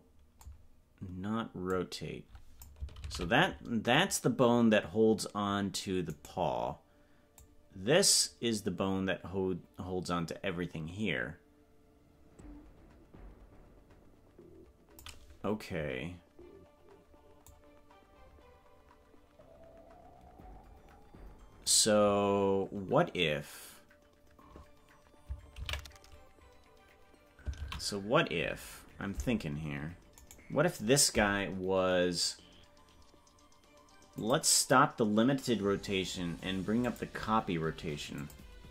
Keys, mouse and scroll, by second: 1.7-2.7 drag, 4.1 ctrl+z, 6.4 right click, 7.3-15.0 drag, 17.4-21.7 drag, 30.6-34.3 right drag, 34.3 click, 36.8 click, 38.2 click.